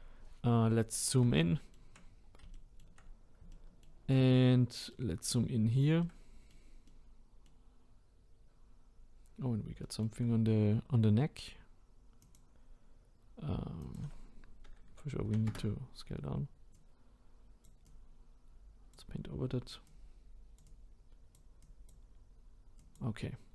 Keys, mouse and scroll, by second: 4.4-4.9 scroll up 5, 4.9-5.6 middle drag, 5.6-6.0 scroll down 1, 6.0-7.8 shift+middle drag, 7.8-9.6 scroll up 1, 12.4-23.5 drag.